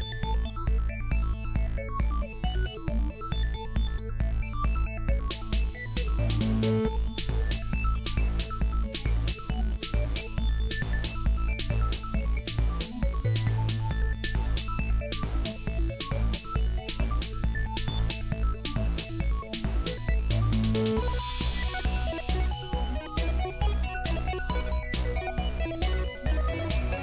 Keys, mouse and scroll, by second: 2.1-2.8 right drag, 3.7 s, 4.8 g, 5.5 s, 6.7 g, 7.9 shift+d, 9.8 shift+d, 11.3 r, 12.6 g, 13.3 shift+s, 13.7 shift+d, 14.9 ctrl+l, 15.5 ctrl+l, 16.1 ctrl+l, 16.9-18.5 middle drag, 19.7-20.4 middle drag, 21.2 middle click, 21.4 click, 22.6-26.6 typing, 24.9-25.4 drag, 26.2 drag, 26.8 drag.